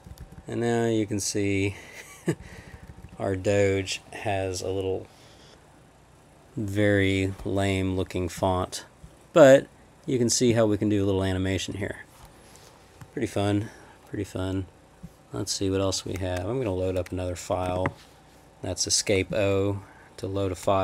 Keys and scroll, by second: 0.1 Down, 0.2 Left, 0.4 Left, 0.9-1.5 Left, 2.0 Left, 2.4 Down, 2.6 Down, 2.7 Down, 17.5 Escape, 17.7 o.